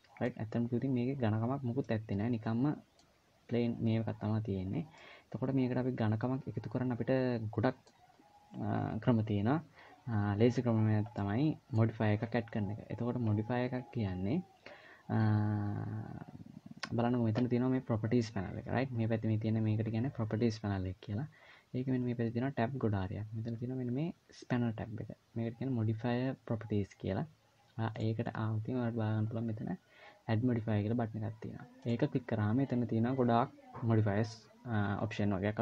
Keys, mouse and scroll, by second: 0.2-1.1 scroll up 1, 1.6 middle click, 4.1-5.1 scroll down 4, 4.8 middle click, 10.9 middle click, 27.7 click, 29.0-30.8 scroll up 2, 31.7 click.